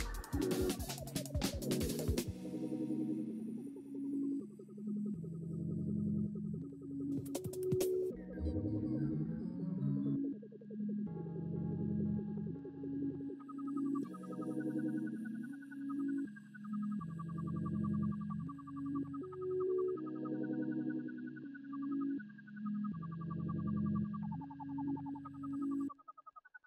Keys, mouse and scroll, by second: 1.0 double click.